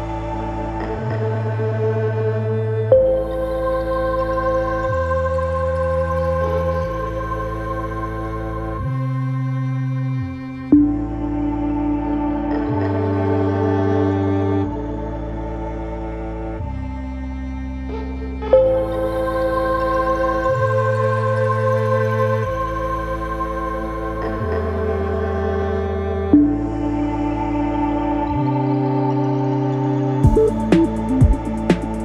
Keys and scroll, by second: 0.3 ctrl+z, 6.5 4, 7.5 3, 14.2 ctrl+z, 15.6 Escape, 25.2 4, 25.7 2, 30.8 ].